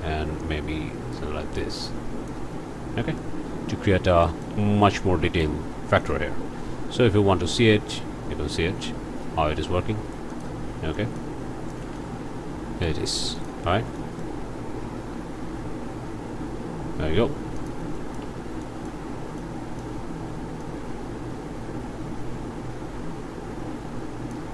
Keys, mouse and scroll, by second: 0.4-2.5 drag, 2.9 scroll down 1, 3.2 click, 3.9 scroll up 1, 4.2 shift+click, 5.0 click, 6.0 click, 6.4 click, 7.5-9.4 drag, 9.5 s, 10.3 click, 11.0 click, 11.5 click, 11.8 alt+a, 12.0-13.0 alt+drag, 13.4 click, 13.9 click, 15.1 g, 17.6 shift+click, 18.0 shift+click, 18.6 shift+click, 19.4 click, 20.6-24.5 drag.